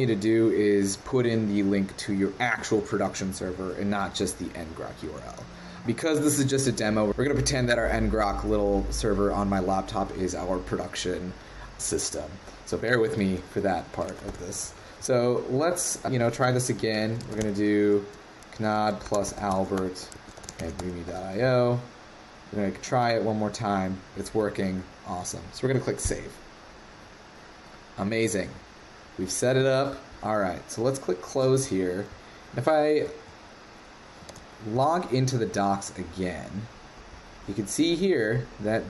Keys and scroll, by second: 13.2 super+v, 34.2 super+w.